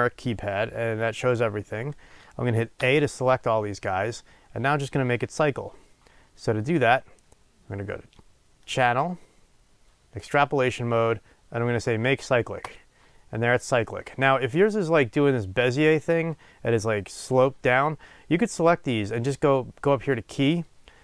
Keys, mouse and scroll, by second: 7.3 click, 12.8-20.4 drag.